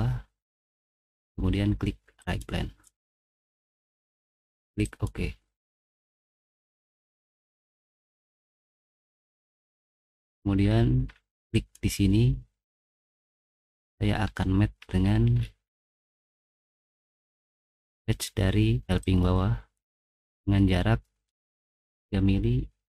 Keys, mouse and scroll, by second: 2.2 click, 4.8 click, 9.4 middle click, 9.6 middle click, 9.9 middle click, 10.6 middle click, 11.0 middle click, 12.9 middle click, 13.4 middle click, 13.8 middle click, 14.2 middle click, 14.8 middle click, 15.3 middle click, 15.8 middle click, 16.1 scroll up 1, 16.2 middle click, 16.6 middle click, 19.3 click, 20.3 click, 21.8 3.